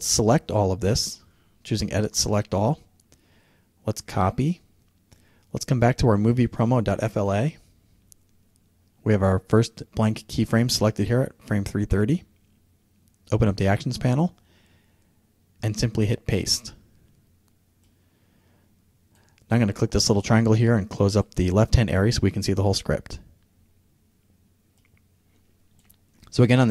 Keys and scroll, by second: 0.0 super+a, 16.0 super+v.